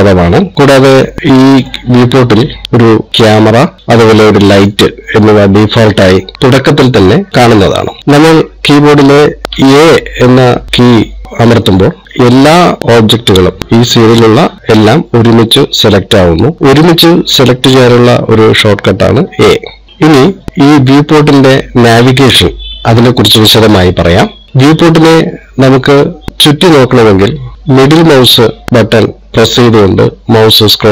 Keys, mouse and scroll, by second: 2.3 scroll down 1, 3.8 click, 4.9 click, 6.7 shift+middle click, 10.0 a, 16.6 click, 19.7 a, 19.9 click, 26.3 middle click.